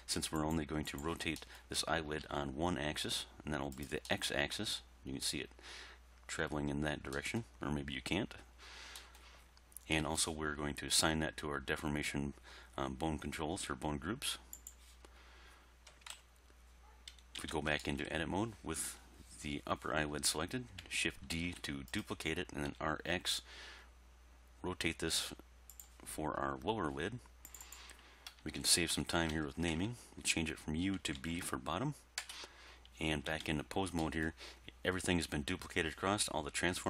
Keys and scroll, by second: 2.3 r, 16.0 1, 16.1 3, 17.4 Tab, 21.5 shift+d, 22.8 r, 23.2 x, 28.4 BackSpace, 31.2 shift+b, 32.2 Return, 33.3 Tab.